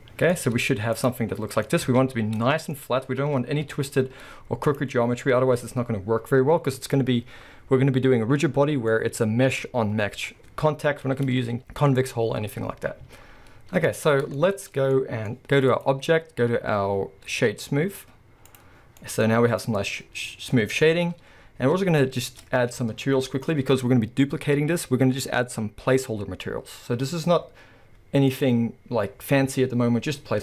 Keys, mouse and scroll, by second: 0.3 z, 1.3-1.6 scroll, 1.6 middle click, 1.8 Tab, 2.1 scroll up 1, 2.4 middle click, 2.8-3.7 scroll up 1, 3.7 KP_1, 3.9 z, 4.8-15.7 middle drag, 4.9-5.6 scroll up 1, 5.6-6.7 scroll down 1, 12.9 scroll down 1, 13.0 z, 15.7-19.0 drag, 19.0-28.3 middle drag, 19.3-20.9 scroll up 2, 20.9 KP_1, 22.3 Tab, 28.3 click.